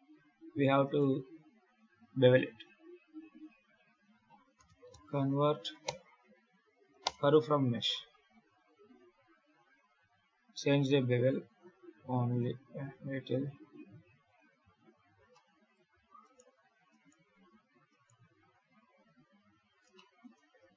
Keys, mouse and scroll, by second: 0.7 right click, 4.0 F3, 9.3 click, 11.3 click, 12.2 click, 14.1 click, 14.6-15.2 scroll up 5, 15.2 middle click, 15.8 alt+a, 16.1 right click, 16.8 right click, 17.8 right click, 18.9 KP_7, 19.8 shift+middle click, 20.2 scroll down 2, 20.6 ctrl+s.